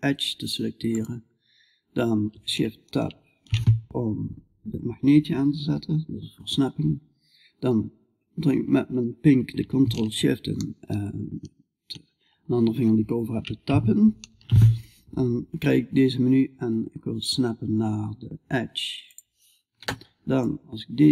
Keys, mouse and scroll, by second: 12.8 ctrl+shift+Tab, 19.8-21.1 drag.